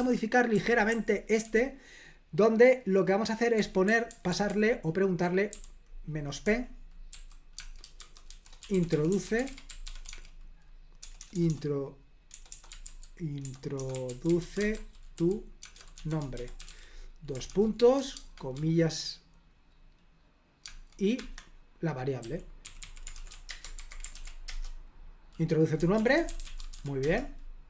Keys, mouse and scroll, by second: 0.5-1.4 typing, 3.6-4.3 typing, 5.5-19.1 typing, 20.6 space, 21.2 Escape, 22.0-23.8 typing, 24.2 ctrl+p, 24.5 Return, 25.9-27.2 typing.